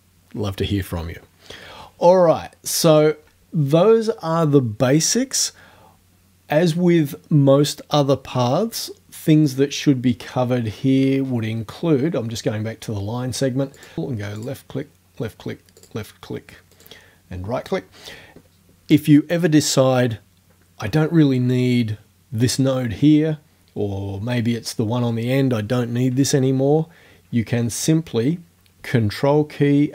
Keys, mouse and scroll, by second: 2.9 right click, 9.5 click, 10.7 middle click, 13.8 click, 14.4 click, 15.8 click, 16.8 right click.